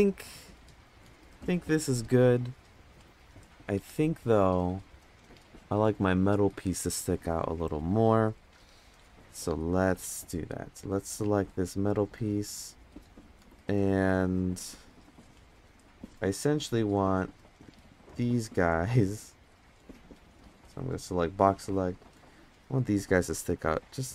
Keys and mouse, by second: 10.7 click, 11.6 click, 14.0-15.2 middle drag, 16.7 click, 17.5-18.0 drag, 18.8-19.1 drag, 19.8 click, 20.4-21.2 drag, 22.1-24.1 drag.